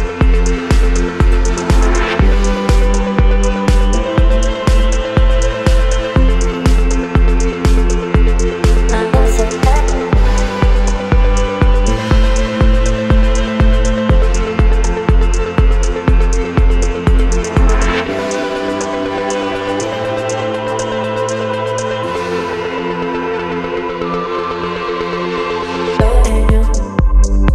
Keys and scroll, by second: 1.1 Return, 22.2 KP_5, 25.7 KP_7, 26.6 Return.